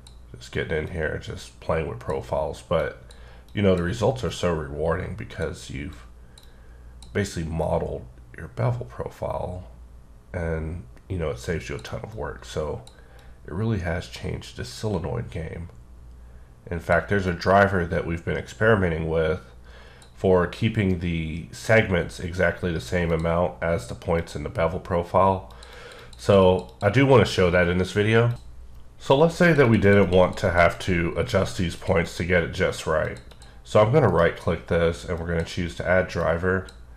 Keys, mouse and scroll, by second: 1.1 click, 3.0 click, 4.5-5.5 drag, 6.4 double click, 7.6 click, 12.1 click, 13.2 click, 17.3 click, 23.1 click, 24.1 click, 25.5 click, 25.7 double click, 25.9 click, 26.4 double click, 26.7 click, 29.7 double click, 29.9 click, 30.0 click, 30.3 double click, 30.5 click, 30.8 click, 31.8 click, 32.1 double click, 33.1 click, 33.3 double click, 33.4 double click, 34.1 right click, 35.2 click, 36.2 click.